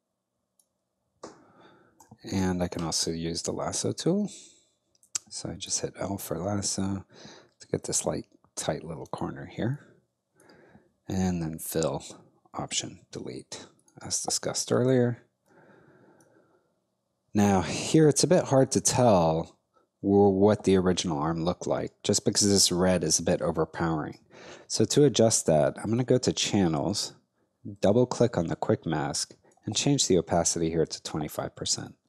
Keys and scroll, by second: 2.0 i, 12.6 alt+BackSpace, 14.0 alt+space, 21.9 space, 30.1-31.0 typing.